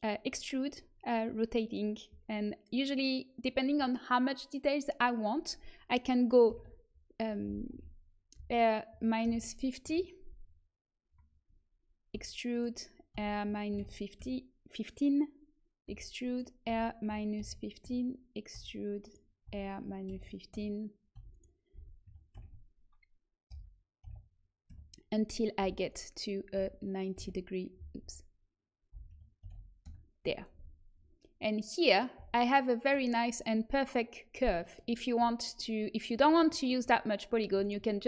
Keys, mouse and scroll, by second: 8.3 r, 12.1 e, 13.1 r, 15.8 e, 16.6 r, 18.5 e, 19.4 r, 21.1 e, 21.7 r, 25.5 e, 26.5 r, 29.0 r, 32.2 z, 36.0-38.0 drag, 37.5-38.0 right drag.